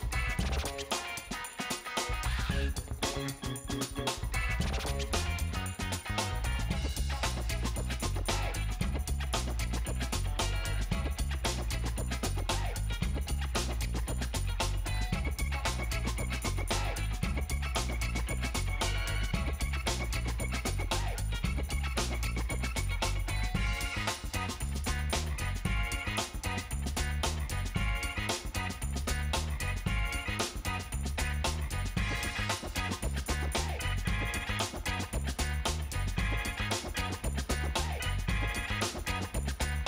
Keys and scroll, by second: 2.9 ctrl+alt+shift+7, 3.5 Return, 21.9 1, 23.7 Tab, 24.4-25.8 typing, 27.5 space, 33.1 3, 33.4 Return, 38.7 space.